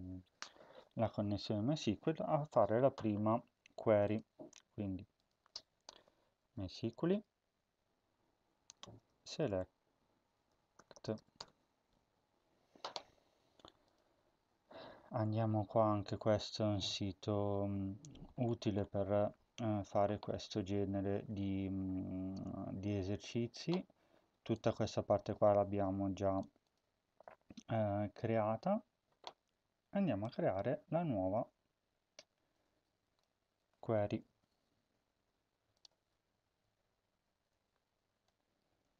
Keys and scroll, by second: 5.7-7.5 typing, 9.0-11.6 typing, 34.2 ctrl+c.